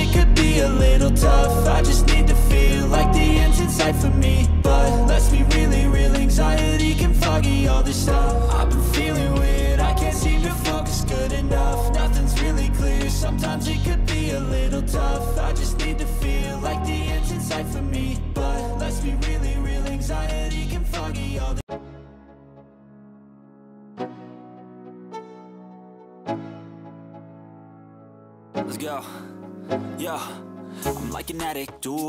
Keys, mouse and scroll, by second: 4.1 right click.